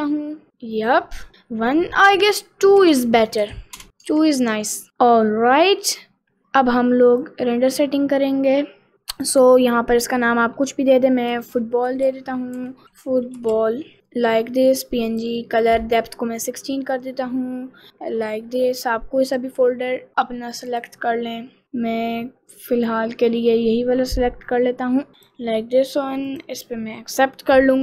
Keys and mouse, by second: 2.1-3.9 drag, 3.9 right click, 4.4 ctrl+s, 7.3 click, 9.3-14.0 drag, 12.2 o, 13.5 l, 15.5 click, 19.4 click.